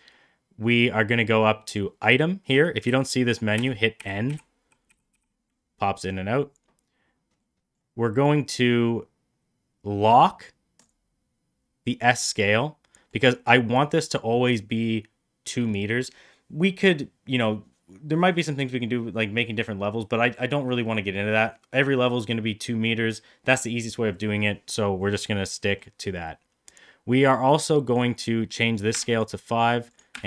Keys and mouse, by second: 1.5 click, 2.4 middle click, 2.8-5.0 typing, 7.3 middle click, 10.7 click, 12.5-13.0 middle drag, 25.0-25.7 middle drag, 27.8-29.1 drag, 29.8 click.